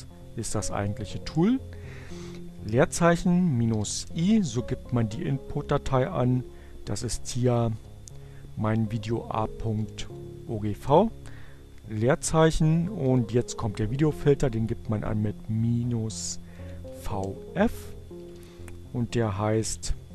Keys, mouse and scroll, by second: 2.1 -, 2.4 space, 4.8 a, 6.9-7.9 typing, 9.5-10.3 typing, 12.3 -, 15.1 f, 15.2 space, 17.2-18.4 typing, 19.7-20.1 typing.